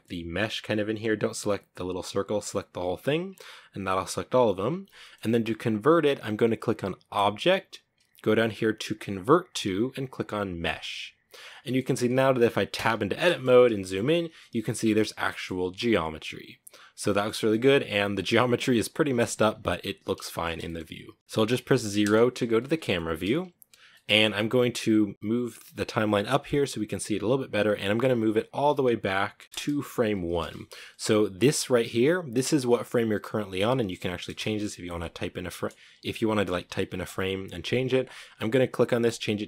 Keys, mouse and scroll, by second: 0.3 right click, 1.9 right click, 2.4-3.0 scroll down 1, 3.0 scroll down 1, 3.8-4.2 scroll up 1, 4.2-10.0 shift+middle drag, 10.8-12.0 middle drag, 12.0 Tab, 12.5 shift+middle click, 12.6-13.5 scroll up 8, 13.0 shift+middle click, 13.5 a, 13.6 a, 14.1 a, 14.4-16.0 shift+middle drag, 16.0 scroll down 1, 16.4 shift+middle click, 16.5 scroll up 2, 16.7-18.4 middle drag, 18.4 Tab, 18.7 scroll down 4, 19.4-20.1 shift+middle drag, 20.1-20.5 scroll down 3, 20.6 shift+middle click, 21.2 KP_0, 22.1-22.7 shift+middle drag, 22.7-23.1 scroll up 1, 23.1-25.1 shift+middle drag, 25.1-29.4 drag, 29.4 Right, 31.6 click, 36.3 click, 38.3 click.